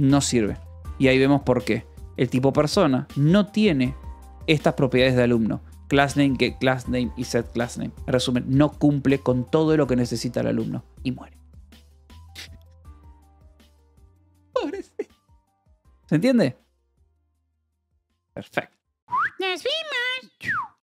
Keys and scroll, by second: 0.3 d, 8.5 Escape.